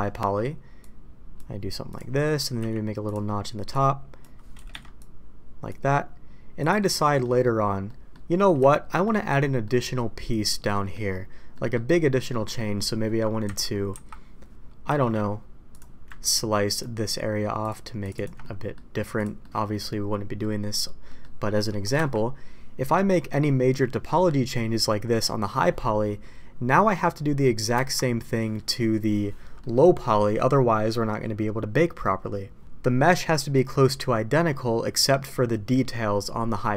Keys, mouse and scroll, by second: 0.8-2.0 drag, 2.2 middle click, 2.5 d, 3.7-4.6 drag, 4.7 Escape, 4.9-6.7 drag, 6.9 drag, 7.9 middle click, 8.6 shift+drag, 9.6 click, 10.7 click, 11.5 click, 12.3 middle click, 13.4 KP_3, 13.9 KP_5, 14.8 d, 16.2-16.8 ctrl+middle drag, 18.4-19.2 middle drag, 19.4 middle click, 21.0 middle click, 21.9 KP_5, 27.7 KP_Divide, 29.5 drag.